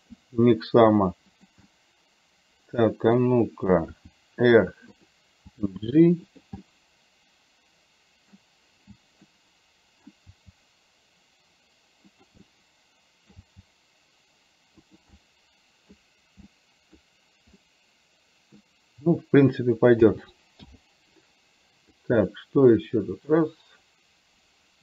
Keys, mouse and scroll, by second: 1.5 g, 1.6-3.3 middle drag, 4.1 r, 5.6 g, 6.8-8.4 middle drag, 9.4 middle click, 10.8 g, 12.5-13.5 middle drag, 12.5-13.4 scroll up 1, 15.0 g, 15.3 middle click, 16.6 middle click, 17.0-17.4 scroll down 1, 17.6-18.6 middle drag, 17.6 scroll up 1, 20.1 a, 20.8 i, 22.1-24.8 drag.